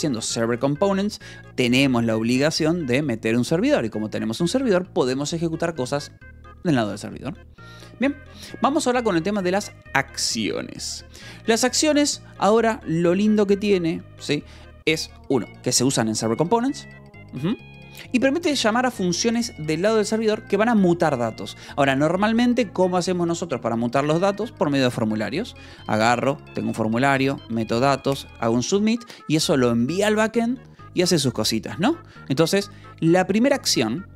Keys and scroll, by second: 2.8 k, 3.9 Escape, 4.2 k, 5.1 shift+v, 6.6 Escape, 7.7 j, 8.8 shift+v, 11.0 Escape, 11.6 j, 12.4 shift+v, 33.0 Escape.